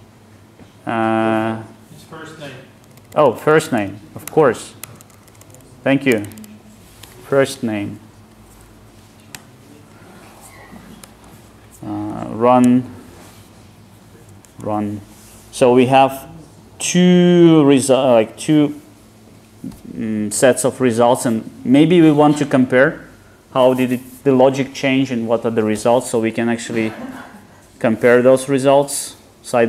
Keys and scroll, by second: 9.4 Tab, 11.0 alt+Return.